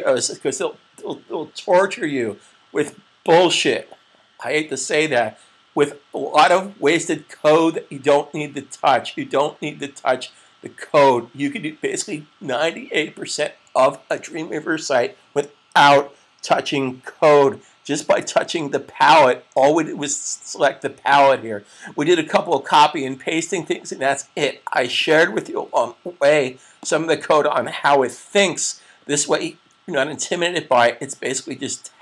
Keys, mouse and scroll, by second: 26.6 click.